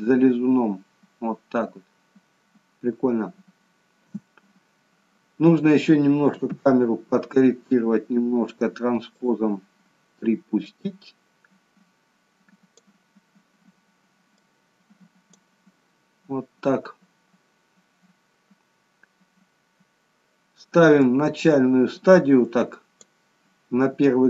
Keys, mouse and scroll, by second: 4.1 space, 6.4 KP_0, 9.1 click, 10.6 click, 14.3 click, 19.1-20.1 scroll up 1, 21.0 click.